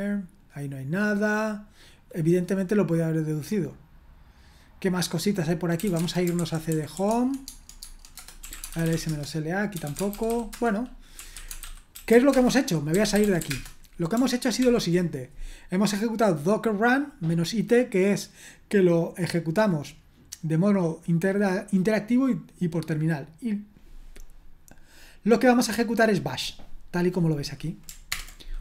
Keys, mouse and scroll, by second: 3.7 click, 5.5 click, 5.7-15.1 typing, 26.0 click, 26.2 click, 27.1 click, 27.8 ctrl+click, 28.1 ctrl+Return.